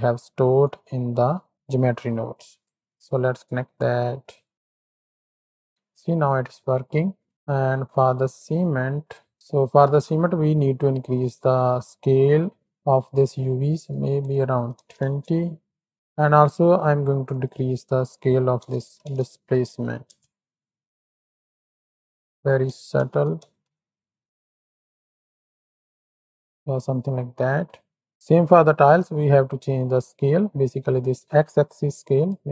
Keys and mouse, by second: 0.6-2.9 drag, 3.5 click, 4.5 click, 5.9-7.3 middle drag, 7.9 click, 11.7 click, 13.8-15.1 drag, 17.7-20.2 drag, 19.1 KP_0, 21.0-22.0 drag, 22.4-24.3 drag, 23.3 KP_0, 24.5-26.8 drag, 28.1 ctrl+z, 28.9 click, 29.4 shift+click, 32.2 click.